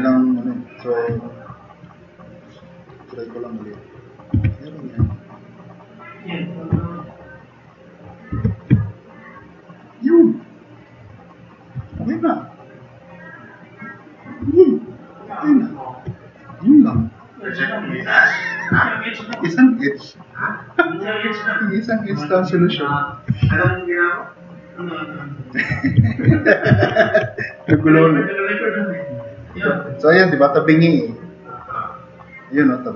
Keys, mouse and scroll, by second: 1.8 click, 2.4 click, 3.5 click, 4.4 2, 8.3 4, 9.9-11.5 drag, 17.2 drag, 17.7 click, 18.5-19.6 drag, 20.9 drag, 23.5 r, 23.9-24.2 drag, 26.9 ctrl+z, 27.2 ctrl+z, 27.9-28.9 drag, 29.7 click.